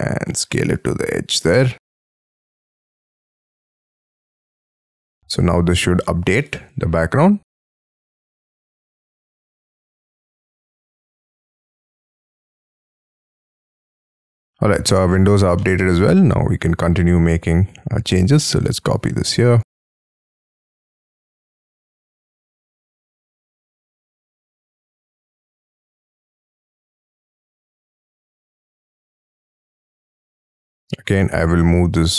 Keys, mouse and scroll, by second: 2.5-3.0 scroll up 13, 10.4 middle click, 10.7-12.7 scroll down 2, 14.0 middle click, 14.4-15.2 scroll down 9, 15.0 space, 15.7 middle click, 16.1 scroll down 1, 16.9 scroll up 6, 17.2 Escape, 17.8 double click, 18.2 double click, 18.6 click, 19.7 m, 19.9 scroll down 5, 20.2 scroll up 3, 20.5 shift+middle click, 21.4 shift+click, 21.6 middle click, 21.8-23.4 typing, 21.9 scroll up 11, 22.3 double click, 24.1 scroll down 3, 24.3 middle click, 26.7-27.2 scroll down 16, 27.7 scroll up 3, 28.6 shift+middle click, 29.6 shift+click, 29.9 middle click, 30.2 shift+middle click, 30.4 shift+scroll down 3, 30.7 m, 30.8-31.2 scroll up 7.